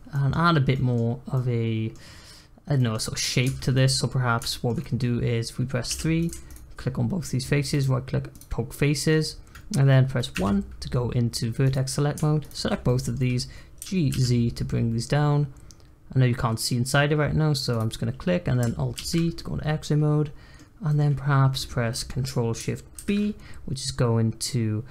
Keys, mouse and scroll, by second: 1.1 scroll up 1, 1.3-3.4 middle drag, 3.4 Tab, 3.7 middle click, 4.1-4.5 scroll up 1, 4.5 shift+middle click, 5.4-5.9 scroll down 1, 5.9 3, 6.2 click, 6.4 shift+click, 7.7-8.9 right drag, 8.9 middle click, 9.2-10.3 scroll up 1, 10.3 1, 11.6 click, 12.4 shift+click, 12.8 middle click, 13.7 g, 18.9 alt+z, 19.3-22.9 middle drag, 22.9 ctrl+shift+b.